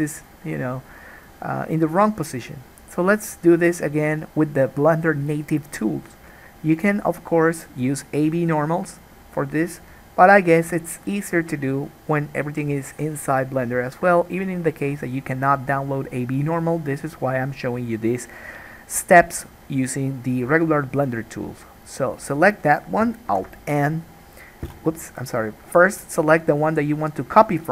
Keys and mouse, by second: 0.4-9.0 middle drag, 9.0 click, 9.1-25.8 middle drag, 23.4 alt+n, 25.8 click, 25.9-27.7 middle drag.